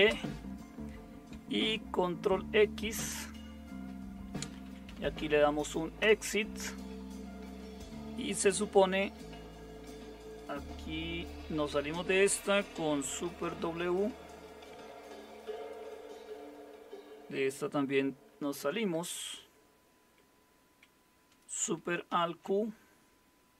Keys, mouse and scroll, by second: 0.0-0.5 typing, 2.7-6.5 typing, 8.9 Return, 13.7 super+w, 15.8 super+0, 18.3 super+w, 22.1 alt+super+q.